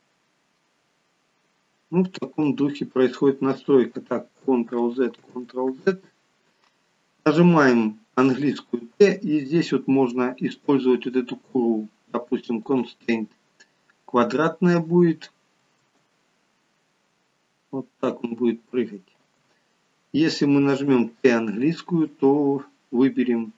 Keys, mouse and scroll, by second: 2.3 space, 4.9 ctrl+z, 5.4 ctrl+z, 8.3 t, 15.8 space, 19.3 space, 20.7 t.